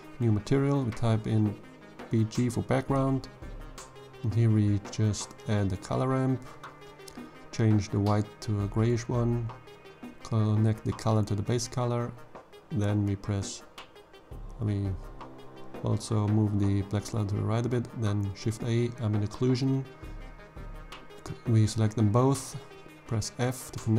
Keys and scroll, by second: 0.0 Return, 3.3 shift+a, 4.0 c, 4.4 o, 4.6 l, 15.9 shift+a, 16.9 m, 17.2 b, 20.1 f, 23.5 1, 23.7 0, 23.8 Return.